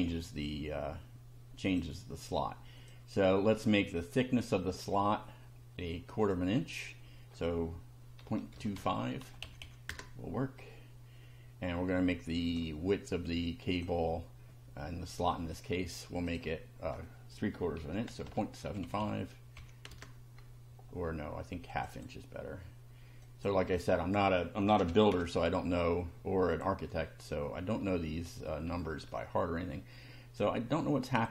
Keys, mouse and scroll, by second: 0.0-2.0 drag, 2.8 click, 4.0 click, 6.2 click, 8.2 KP_Decimal, 8.5 KP_2, 8.8 KP_5, 9.4 Delete, 9.9 Return, 12.4 click, 13.7 click, 16.3 click, 17.8 KP_Decimal, 18.1 KP_7, 18.3 KP_5, 18.6 Delete, 19.9 Return, 21.7 click, 23.2 click, 23.8 click, 24.7 KP_1, 24.8 KP_Divide, 25.1 KP_2, 26.5 click, 28.2 scroll up 1, 28.8 shift+middle click, 30.4 click.